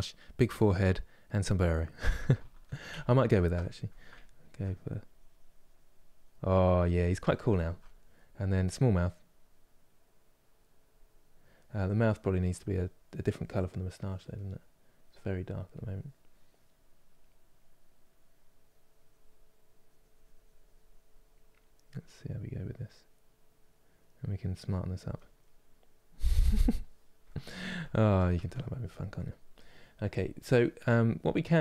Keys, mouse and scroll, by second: 2.2 ctrl+z, 2.6 ctrl+z, 3.3-4.7 middle drag, 4.7-7.3 drag, 7.3-8.8 ctrl+middle drag, 8.8-22.4 drag, 25.1-31.6 middle drag.